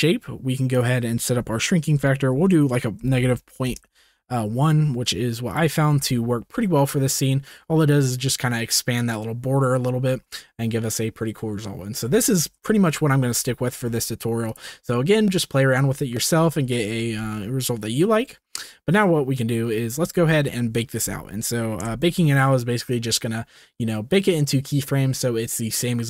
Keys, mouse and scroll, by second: 0.9-3.7 drag, 5.4 drag, 5.9 space, 12.4 space, 13.1 ctrl+s, 18.5-19.3 middle drag, 20.0 ctrl+s, 21.8 KP_0.